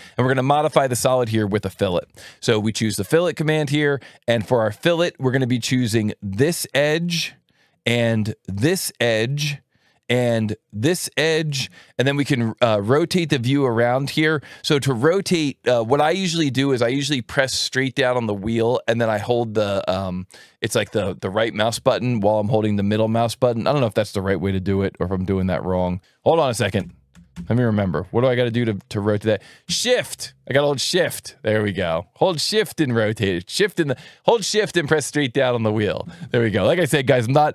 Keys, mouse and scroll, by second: 0.1 ctrl+shift+click, 1.9 alt+1, 3.0 click, 7.0 click, 9.2 click, 11.2 click, 23.3 right click, 26.7 Escape.